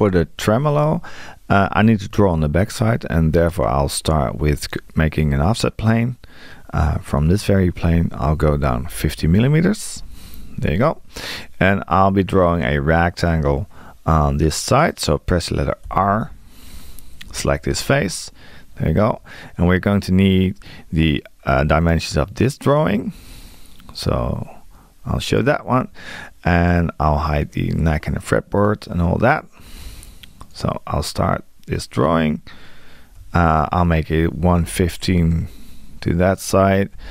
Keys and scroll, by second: 8.4 space, 15.9 r, 33.2 Tab.